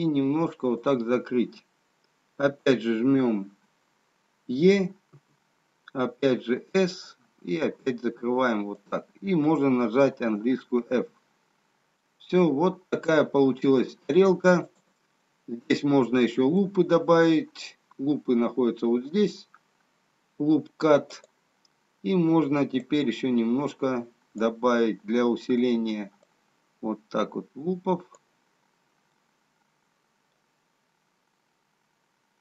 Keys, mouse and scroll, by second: 5.2 e, 11.5 f, 12.6 middle click, 16.9 click, 16.9 middle click, 21.3 click, 23.1 click, 28.5 click, 29.2 middle click.